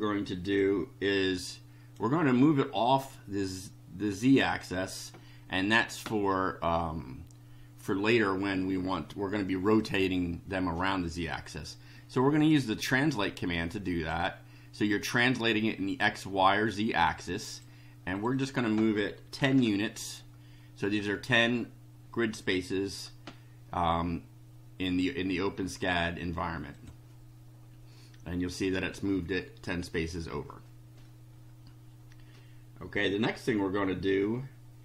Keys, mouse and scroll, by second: 0.6-2.1 drag, 9.8 click, 12.5-14.2 drag, 17.3 click, 18.1 click, 19.1-20.0 typing, 20.8 click, 26.7 click.